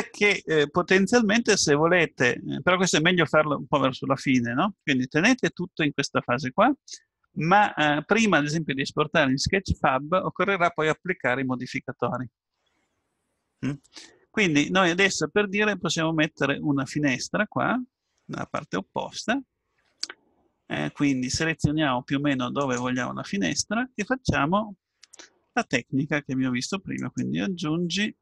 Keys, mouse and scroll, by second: 14.3-18.9 middle drag, 22.6-24.6 drag, 27.0-28.2 drag.